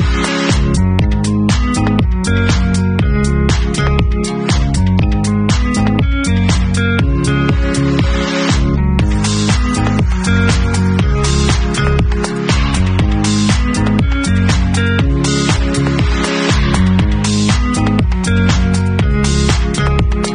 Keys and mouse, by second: 0.4 ctrl+z, 3.1-13.9 drag, 13.9 middle click, 13.9-18.4 drag, 14.4 shift+a.